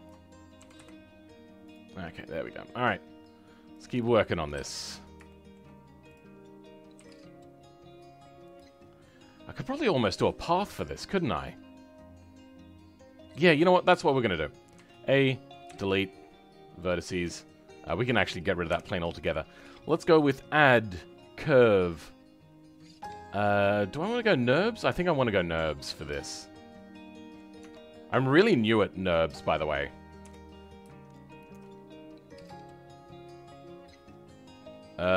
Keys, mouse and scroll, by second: 0.0 ctrl+click, 0.6 g, 1.8-2.1 scroll down 2, 2.1-3.9 middle drag, 3.9 click, 4.5 KP_7, 4.8 scroll up 2, 5.2 shift+middle click, 6.1 click, 6.9 g, 8.6-9.2 scroll down 7, 11.0-13.1 scroll down 3, 13.5 middle click, 14.3-14.7 scroll up 6, 14.7 a, 17.1 Tab, 17.5-18.5 scroll down 5, 18.6 Delete, 19.0-23.5 scroll up 3, 25.7-27.7 middle drag, 27.7 Tab, 28.1-28.5 scroll down 2, 28.7-30.1 middle drag, 30.1 KP_7, 31.0-32.4 shift+middle drag, 32.4 click.